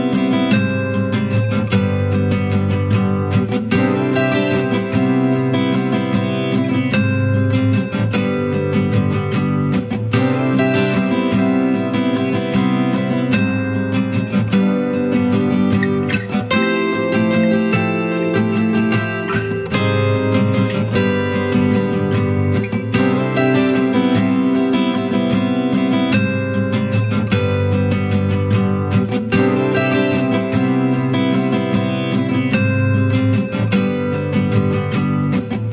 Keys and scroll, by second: 15.5 ctrl+alt+shift+e, 25.6 ctrl+l.